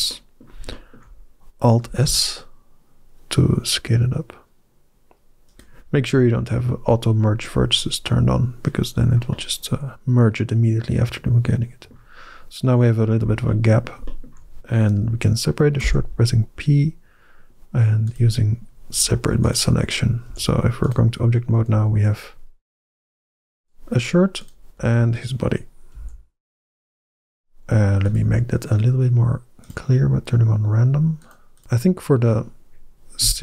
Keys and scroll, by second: 1.7 alt+s, 15.6 p, 20.1 Tab, 21.6 g, 24.6 f, 25.8 g, 31.4 Tab, 33.1 a.